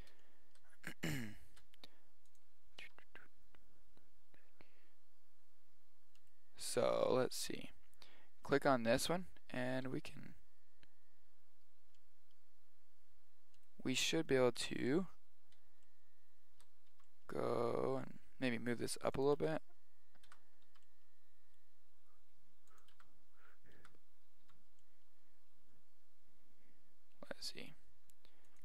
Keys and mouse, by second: 0.2-2.3 middle drag, 2.3-4.0 drag, 2.8 r, 8.5 right click, 9.9 g, 14.6 Tab, 15.4-17.8 middle drag, 16.9 g, 19.3 Tab, 20.3 Tab, 20.7 g, 23.0 Tab, 23.8 Tab, 24.4 g.